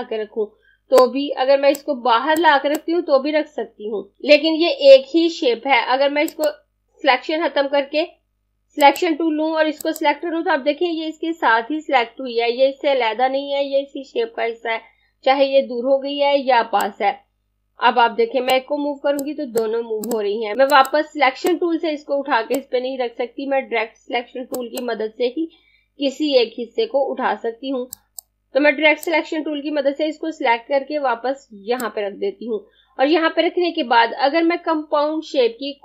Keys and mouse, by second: 6.3 click, 8.9 click, 16.5 click, 27.9 click.